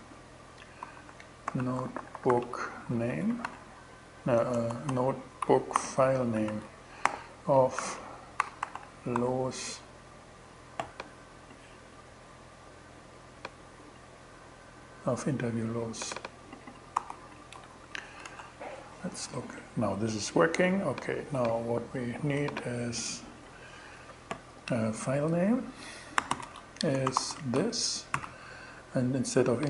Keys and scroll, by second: 0.0-3.8 typing, 4.8 shift+BackSpace, 5.2 shift+f, 5.8 shift+Return, 6.5 alt+g, 7.0 alt+shift+g, 7.2 alt+shift+2, 7.6-9.1 typing, 16.4 super+v, 17.0 shift+super+v, 17.1 shift+super+2, 17.7 shift+Return, 21.8 super+c, 25.4-26.7 typing, 27.6 shift+super+,.